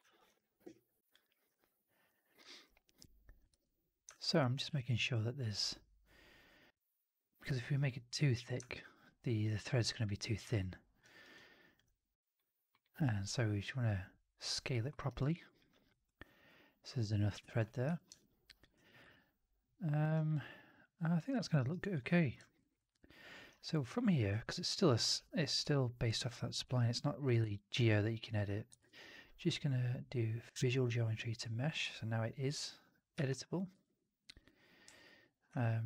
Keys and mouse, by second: 1.3-2.3 drag, 3.4 1, 4.0 alt+click, 4.5 r, 6.4-8.3 middle drag, 8.6 alt+click, 10.5 alt+middle click, 10.9 alt+right click, 11.2 alt+click, 14.8 alt+middle click, 14.9 alt+right click, 15.3 alt+click, 15.8-17.5 alt+drag, 17.7 4, 18.0 click, 19.0 alt+click, 20.0 alt+right click, 20.2-21.2 alt+drag, 21.5 alt+right click, 21.7 alt+click, 22.3 alt+middle drag, 22.5 alt+right drag, 22.6 alt+right drag, 22.8-23.3 drag, 24.2 1, 25.0 4, 25.5 1, 26.5 4, 27.4 alt+click, 28.7 shift+Tab, 31.8 1, 33.7 2, 34.1-35.4 drag.